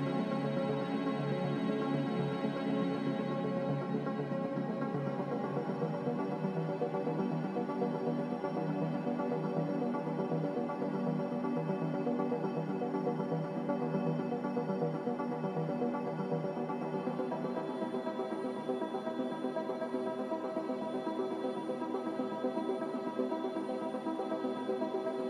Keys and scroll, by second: 22.4-23.7 typing.